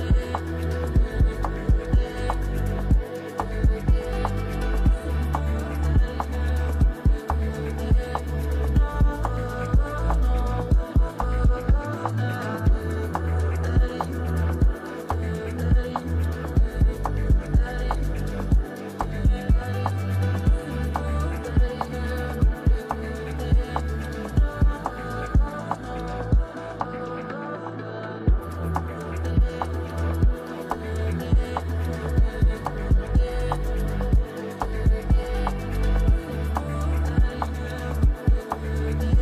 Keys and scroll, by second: 10.0 space, 14.9 space, 16.4 space, 29.4 space, 34.2 Delete.